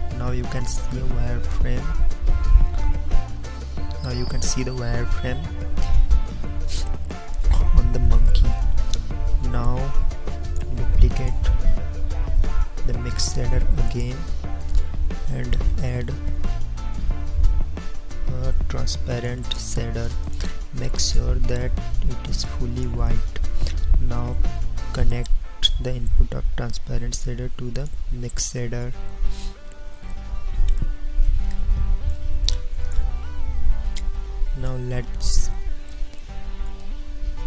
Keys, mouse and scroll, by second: 14.0 shift+d, 14.1-15.8 drag, 16.3 shift+a.